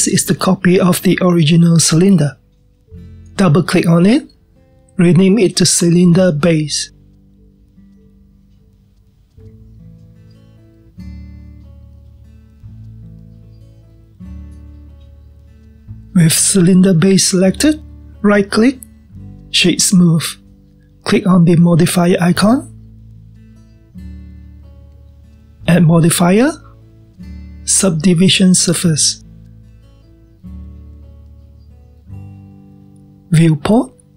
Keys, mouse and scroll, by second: 5.3 click, 5.5-8.0 drag, 8.0 BackSpace, 18.6 click, 20.7-23.8 right drag, 25.1 click, 27.2 click, 29.9 click.